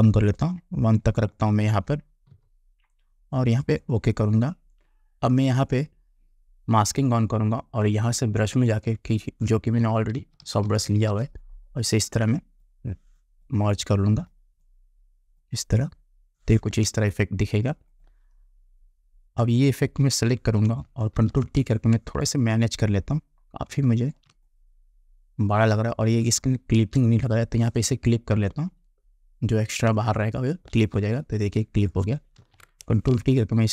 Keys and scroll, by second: 2.4 1, 10.3 [, 21.3 ctrl+t, 26.9 Return, 32.5 ctrl+t.